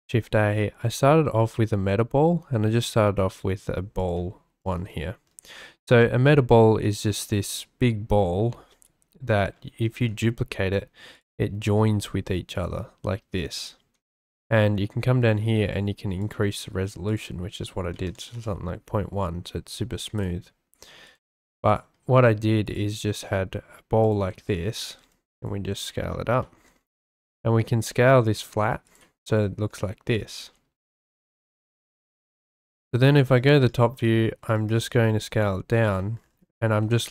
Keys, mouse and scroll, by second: 7.3-8.3 middle drag, 8.7-9.1 shift+middle drag, 9.8 shift+d, 11.1 click, 11.6 shift+d, 16.2 click, 18.1 click, 19.7 x, 21.0 click, 21.5 x, 22.6 click, 23.2 s, 24.0 click, 24.9 g, 25.0 z, 26.4 shift+drag, 27.0 s, 29.3 shift+middle drag, 29.8 click, 32.3 shift+drag, 33.2-33.6 shift+drag, 33.8-34.3 shift+scroll, 34.4 shift+drag, 34.7 shift+scroll, 34.9 s, 35.9 click, 36.7 s.